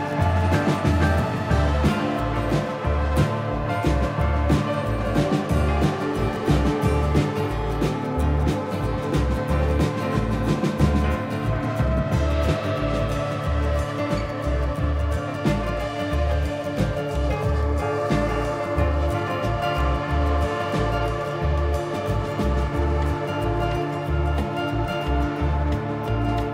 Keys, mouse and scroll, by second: 2.4 shift+middle click, 2.7-3.3 scroll up 3, 3.6-4.4 scroll down 3, 5.5 click, 5.5 scroll down 1, 6.6 ctrl+KP_1, 7.4-7.8 scroll up 2, 7.8 g, 9.4 shift+middle click, 9.7-10.4 scroll up 6, 10.7 g, 11.4 s, 13.5 middle click, 14.5 scroll down 6, 15.2 KP_3, 16.5 click, 17.7 middle click, 19.5 middle click, 20.3 click, 21.7 middle click, 22.7 scroll up 3, 23.1 s, 24.7 click, 25.7 click, 26.3 middle click.